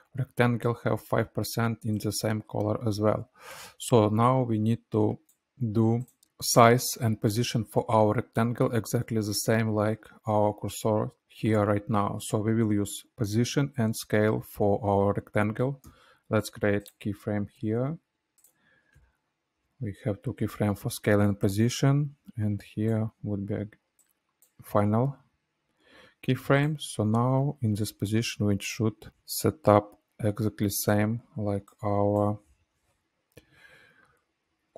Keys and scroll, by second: 16.8 s, 17.4 p, 18.8 u, 19.5 u, 20.3 -, 20.4 -, 31.4 space, 33.2 Left, 33.5 Left, 33.6 Left, 33.8 Left, 34.0 Left, 34.2 Left, 34.6 Left.